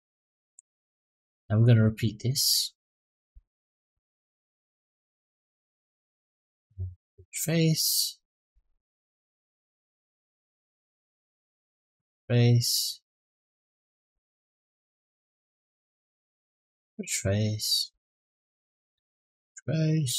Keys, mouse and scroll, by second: 0.1-1.2 middle drag, 1.6 middle click, 2.2 click, 2.5 middle click, 3.4 shift+click, 3.9-7.0 right drag, 7.3 middle click, 8.3 click, 8.8 middle click, 9.6 shift+click, 10.1-11.8 right drag, 11.8 middle click, 13.0 click, 13.4 middle click, 14.2 shift+click, 14.8-16.5 right drag, 16.7 middle click, 17.5 click, 17.8 middle click, 18.5 shift+click, 18.9-20.1 right drag.